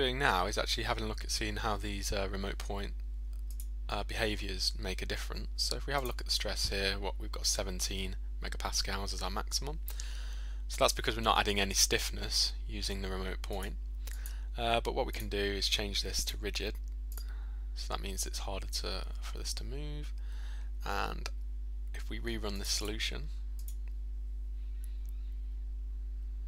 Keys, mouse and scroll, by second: 3.6-4.7 drag, 6.0 click, 13.6 click, 14.2 click, 15.2 click, 16.3 click, 17.1 click, 22.6 click, 22.8 right click, 23.7 click.